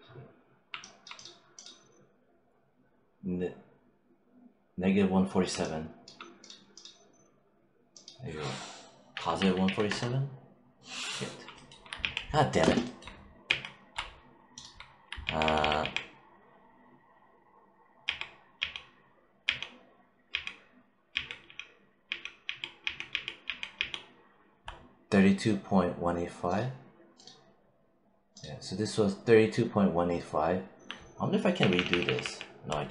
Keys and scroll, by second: 9.0 1, 9.5 7, 9.7 Return, 11.8 ctrl+z, 13.3 ctrl+z, 15.1 ctrl+z, 17.9 ctrl+z, 31.4 ctrl+y.